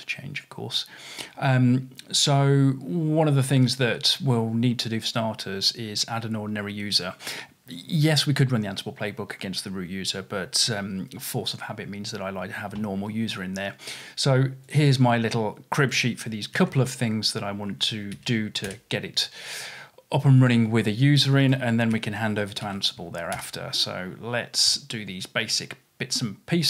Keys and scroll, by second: 16.6 super+c, 18.2 super+v, 22.0 super+c, 22.6 super+v.